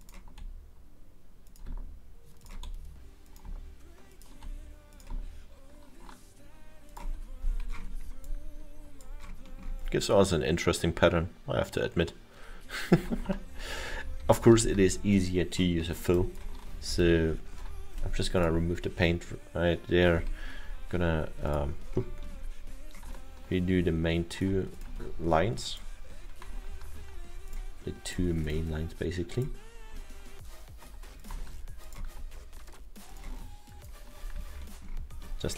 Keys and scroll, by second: 13.5 ctrl+z, 14.4 ctrl+z, 16.8 ctrl+z, 17.0 ctrl+z, 17.5 ctrl+z, 28.8 ctrl+z.